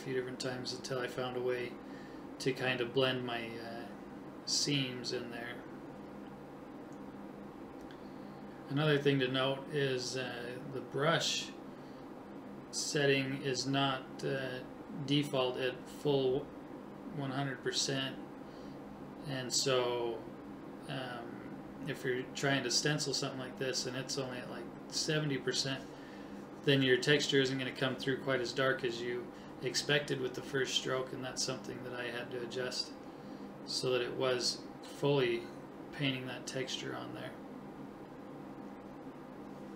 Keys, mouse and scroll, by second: 2.5 right click, 6.4 right click, 11.3 click, 14.4 right click, 15.7 ctrl+z, 17.1 right click, 18.5 ctrl+z, 19.1-20.6 right drag, 20.8 right click, 24.9 click, 26.1 right click, 30.0 click, 33.1 right click, 37.2 click, 39.2-39.7 drag.